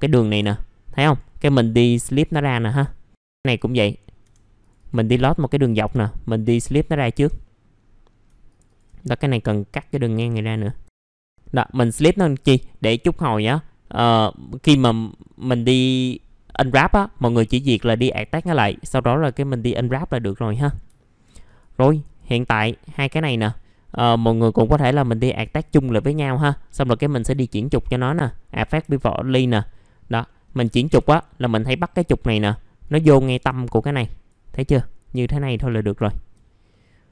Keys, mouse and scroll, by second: 0.3 F4, 1.0 right click, 2.1 click, 2.4-2.8 scroll down 1, 3.5 click, 4.0-4.6 scroll up 2, 4.6 click, 5.1 alt+middle click, 5.9 alt+middle click, 6.8 scroll up 1, 7.1 F3, 7.4 middle click, 7.7-8.2 scroll up 1, 8.4 ctrl+click, 9.1 right click, 9.9 click, 10.1 F3, 10.3-10.8 scroll down 1, 11.0 alt+1, 11.2 alt+middle click, 20.2 alt+middle click, 20.9 alt+middle click, 23.2 alt+middle click, 23.9 right click, 24.8 click, 26.1 right click, 27.2 click, 29.0 alt+middle click, 31.2 scroll down 1, 32.8-35.2 drag, 36.0 alt+middle click, 36.4 scroll down 1, 36.7 middle click.